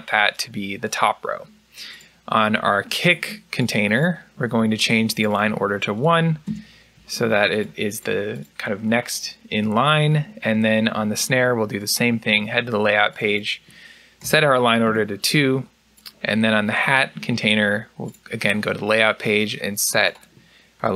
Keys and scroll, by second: 6.3 Return, 14.7 Return.